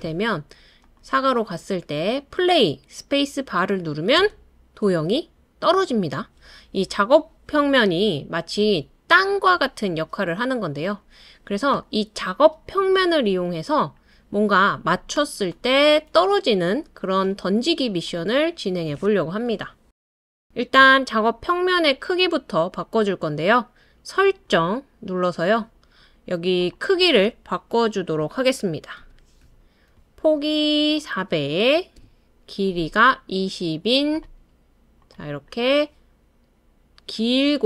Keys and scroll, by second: 4.2 space, 19.5 BackSpace, 29.0 BackSpace, 29.4 4, 32.0 BackSpace.